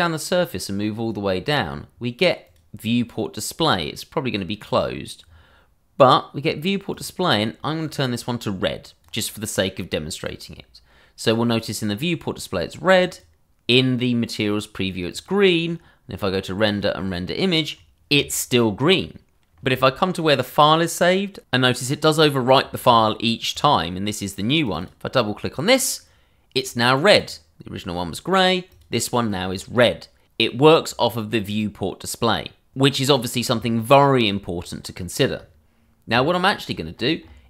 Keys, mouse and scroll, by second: 2.4 click, 4.6 click, 5.1 scroll down 1, 6.9 click, 13.0 click, 23.5 click, 24.9 double click, 27.1 click, 32.8 click, 34.8-36.3 scroll, 36.3 scroll down 1, 36.6 scroll.